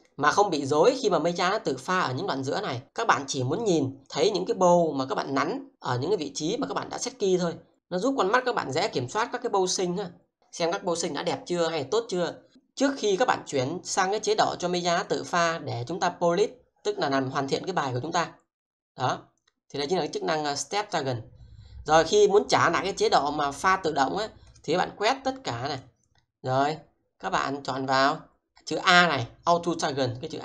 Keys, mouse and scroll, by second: 3.0 double click, 4.0 click.